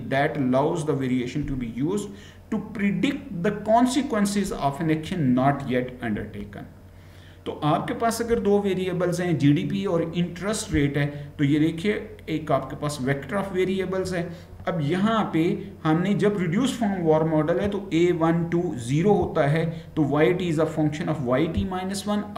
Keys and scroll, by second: 6.3 Right.